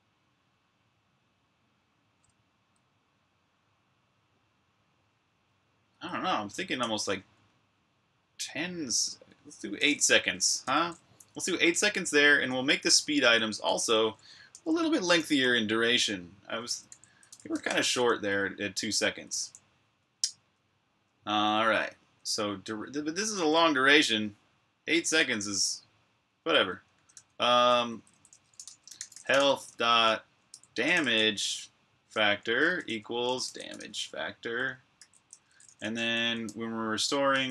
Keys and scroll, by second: 5.8-7.0 typing, 9.5-17.3 typing, 23.5-24.3 typing, 26.1-28.9 typing, 32.3 typing.